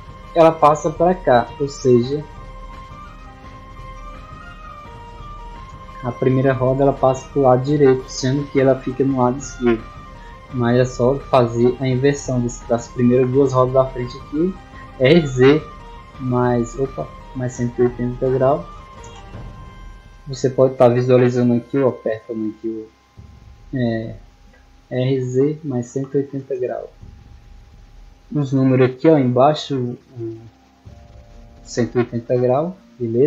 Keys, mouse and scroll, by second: 3.2 click, 4.0-4.6 drag, 5.3 shift+right click, 7.0 click, 10.4 right click, 11.8 shift+right click, 12.9-13.3 middle drag, 14.1 r, 16.8 right click, 17.6 r, 19.6 click, 22.9 right click, 23.8 shift+right click, 24.7 r.